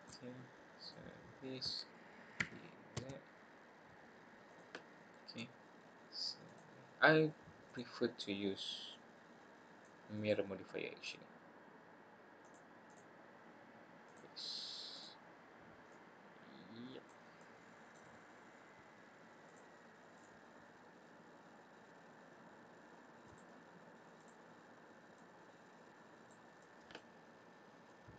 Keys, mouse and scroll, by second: 0.7 click, 2.4 e, 4.8-5.3 scroll up 2, 6.4 click, 7.7 click, 8.9 click, 10.1 middle click, 10.6 middle click, 12.4 click, 12.8 click, 14.0 click, 14.9 click, 15.9 click, 17.3 middle click, 18.3-18.9 scroll down 1, 19.4 click, 20.1 click, 23.2 click, 24.1 click, 25.1 click, 26.6 middle click, 27.9 click.